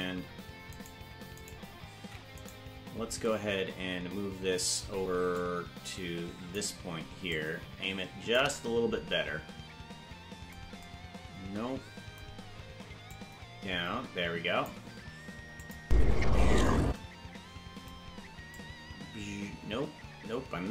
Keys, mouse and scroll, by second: 0.8 right click, 1.4 right click, 2.0 ctrl+Tab, 2.5 right click, 5.4-6.6 drag, 7.3-8.4 drag, 13.1-14.7 drag, 15.6 click, 15.8 space, 16.9 space, 18.6-20.7 drag.